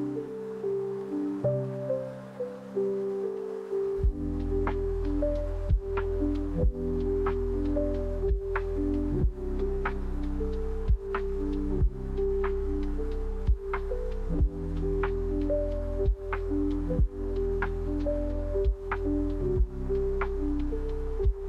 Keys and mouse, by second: 0.3 ctrl+KP_Add, 1.0 alt+z, 2.0 shift+d, 3.3 p, 4.1 Tab, 5.8 KP_Divide, 6.0 KP_Divide, 7.7 Tab, 9.6 f, 10.6 ctrl+KP_Add, 10.8 ctrl+KP_Add, 11.0 ctrl+KP_Add, 11.1 ctrl+KP_Add, 11.3 ctrl+KP_Add, 12.1 f, 13.4 a, 13.9 s, 15.0 shift+click, 15.3 Tab, 15.7 KP_Divide, 16.5 z, 19.4 click, 20.4 click.